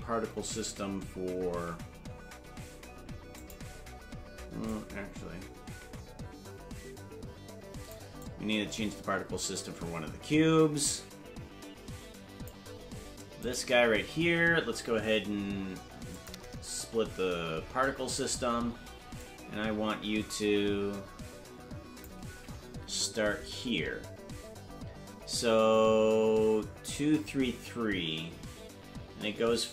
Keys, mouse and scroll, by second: 1.0-2.9 scroll down 2, 3.3 click, 4.7-8.0 drag, 8.2-12.5 drag, 13.5 right click, 16.1 click, 19.2-22.0 drag, 22.8 Left.